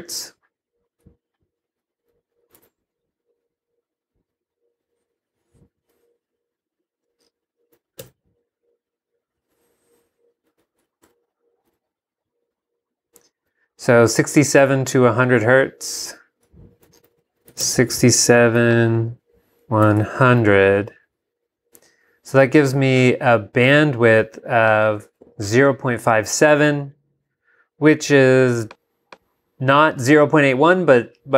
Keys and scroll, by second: 2.6 alt+Tab, 8.0 y, 9.5 super+Down, 14.6 super+Tab, 17.3-18.1 typing, 19.4-20.3 typing.